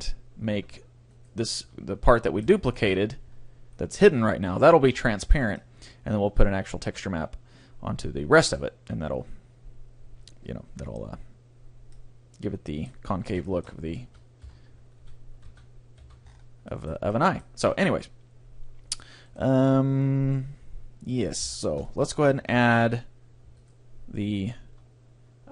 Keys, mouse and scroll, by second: 0.5 z, 1.2 right click, 1.7 Tab, 2.5 Tab, 2.9 Tab, 3.9-7.5 middle drag, 3.9 right click, 4.4 a, 11.9-14.5 middle drag, 14.1 a, 14.5 Tab, 15.0 a, 15.4 z, 16.0 z, 16.2 middle click, 18.2-22.0 middle drag, 19.4-21.0 right drag, 21.5 Tab, 22.4 a, 23.6-25.5 right drag.